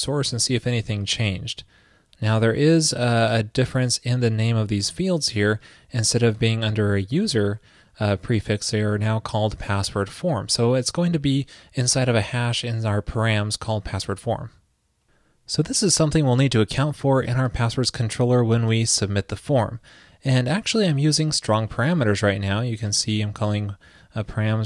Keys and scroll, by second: 0.2 alt+super+u.